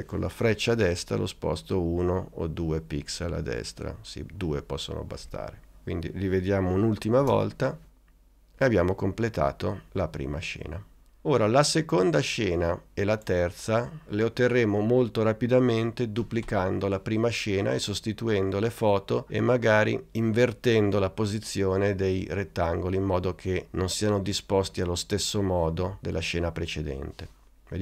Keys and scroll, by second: 1.1 Right, 3.2 Right, 4.5 Left, 7.3 space.